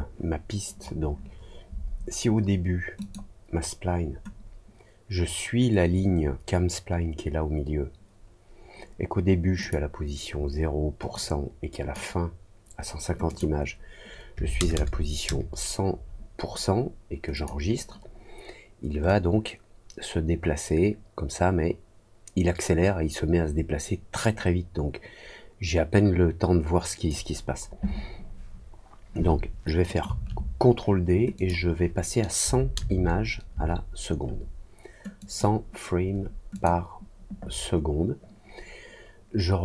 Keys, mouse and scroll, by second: 2.9 click, 9.5 click, 11.1 click, 13.2 click, 17.3 click, 19.0-27.0 drag, 31.3 click, 35.1 click, 36.5 click.